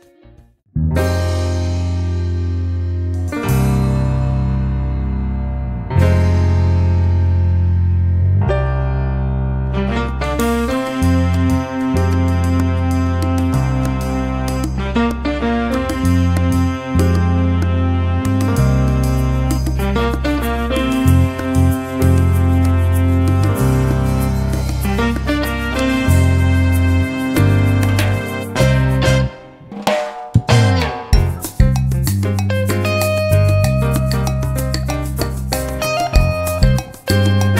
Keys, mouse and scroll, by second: 0.1 click, 3.7 KP_Subtract, 4.9 ctrl+a, 6.4-9.8 drag, 10.0 ctrl+shift+click, 11.2 KP_Add, 12.7-14.2 drag, 16.1 ctrl+d, 17.1 click, 18.4-19.5 drag, 19.7-23.5 drag, 24.8 click, 26.8 click, 27.4 click, 31.1 click, 33.1-34.5 drag, 34.8 click.